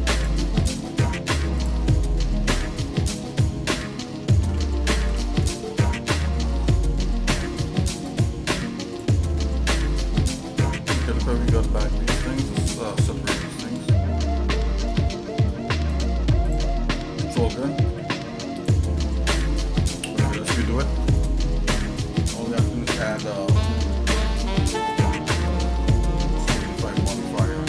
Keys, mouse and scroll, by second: 0.2 shift+click, 0.7 shift+click, 0.9 shift+middle click, 1.6 shift+click, 1.9 shift+middle click, 3.0 shift+middle click, 3.7 ctrl+z, 4.5 ctrl+z, 5.1 ctrl+z, 5.5-6.6 shift+middle drag, 8.0 shift+click, 8.9 ctrl+shift+click, 9.6-10.8 shift+middle drag, 11.0 scroll down 1, 11.5 shift+middle click, 12.0 middle click, 13.1 p, 14.5 Tab, 15.0 shift+middle click, 15.9 click, 16.5 click, 17.9 Delete, 18.5 click, 18.8 Delete, 19.3 click, 19.5 Delete, 20.0 middle click, 20.5 shift+middle click, 21.2 click, 23.3 click, 25.5 click, 26.4-27.6 drag.